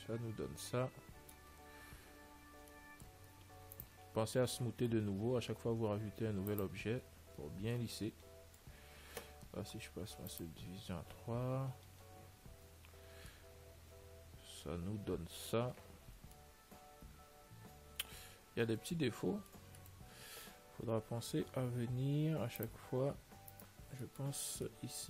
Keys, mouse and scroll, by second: 0.0-4.9 middle drag, 3.9 ctrl+s, 5.1 t, 6.8 click, 7.5 t, 8.0-9.9 middle drag, 10.6 click, 13.0 a, 13.7-15.5 middle drag, 16.0-21.7 middle drag, 19.1 Tab, 22.9 click, 23.8-25.0 right drag, 24.5-25.0 middle drag.